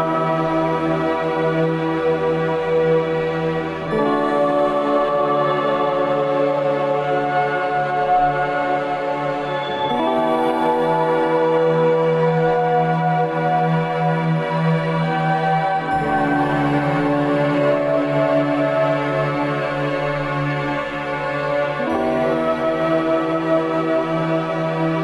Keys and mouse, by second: 0.3 ctrl+s, 8.4 Tab, 9.6-10.4 middle drag, 10.6 ctrl+s, 20.8 click.